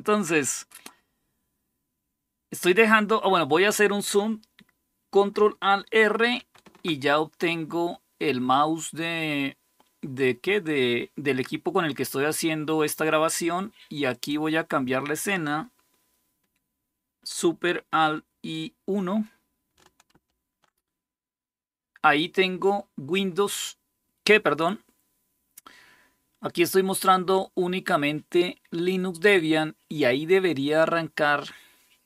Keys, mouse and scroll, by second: 13.8 click, 19.9 alt+super+1, 20.0 alt+super+KP_1.